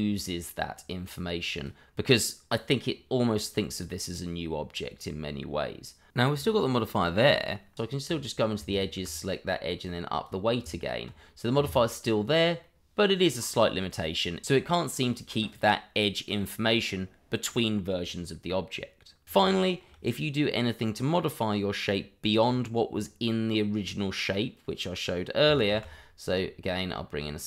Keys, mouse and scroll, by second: 6.5 click, 7.7 Tab, 8.7 alt+click, 9.5 click, 10.6 Tab, 12.0-12.6 scroll down 1, 12.6 middle click, 19.2 Delete, 19.6 shift+middle click, 19.6 middle click, 19.7 shift+middle click, 25.6 shift+a.